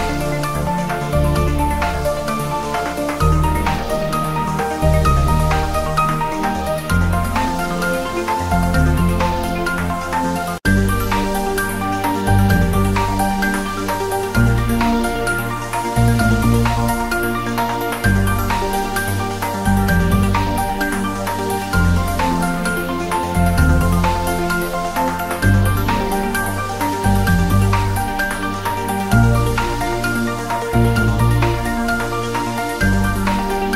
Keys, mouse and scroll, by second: 0.1-0.8 click, 0.9-2.1 scroll down 1, 2.3 click, 2.8 scroll up 1, 3.4 click, 3.7-4.5 scroll down 1, 4.7-5.2 scroll down 1, 6.0 g, 6.4 click, 6.5-7.2 scroll up 1, 7.2 g, 7.7 click, 8.0-8.3 scroll up 1, 8.6 click, 9.1-9.9 scroll down 2, 9.5 click, 12.8-13.5 scroll down 1, 13.6 click, 13.9 scroll down 1, 15.1-15.6 click, 15.7 scroll down 1, 16.7 shift+a, 17.2 click, 17.4 b, 17.7-18.8 drag, 22.1 shift+a, 22.7 shift+a, 23.1 ctrl+s, 23.8 ctrl+s, 28.0 click, 28.3-30.9 typing, 28.8 click, 29.6 click, 30.1 click, 30.8 click, 31.3 scroll up 1, 32.0-32.6 drag, 33.6 ctrl+s.